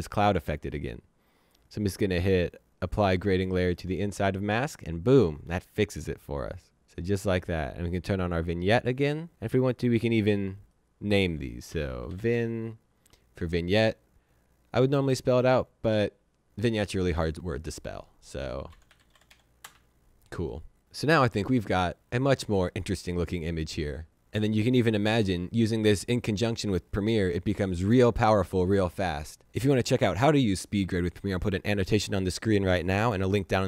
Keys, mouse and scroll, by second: 3.7 click, 6.8 click, 9.1 click, 10.5 right click, 11.4-12.5 typing, 15.1 click, 18.4-19.7 typing.